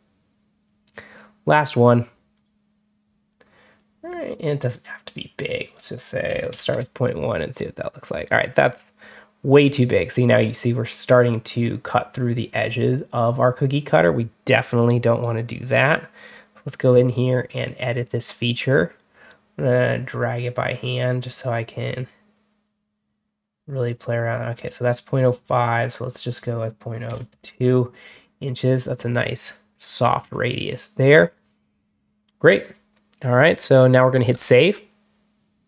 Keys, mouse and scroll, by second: 2.2 click, 3.9 click, 5.2 click, 14.6 click, 15.0 right click, 16.0 click, 20.1-23.7 drag, 24.4 click, 25.5 click, 28.3 click, 29.0 click, 30.1 click, 34.2 click.